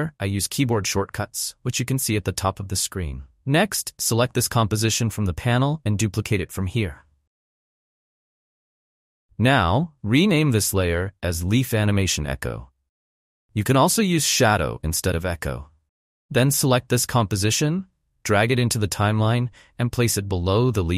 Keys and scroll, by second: 7.1 ctrl+d, 12.2 Return, 12.8 Right, 13.1 BackSpace, 14.8-16.3 typing, 16.8 Return.